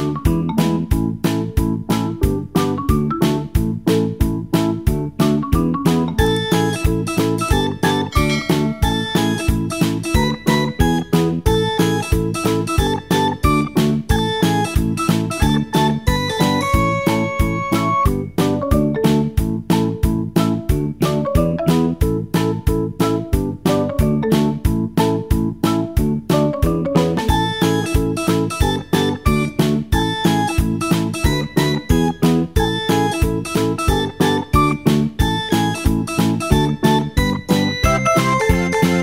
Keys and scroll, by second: 21.6 Escape, 24.5-26.0 typing, 26.8 Return, 27.5 Return.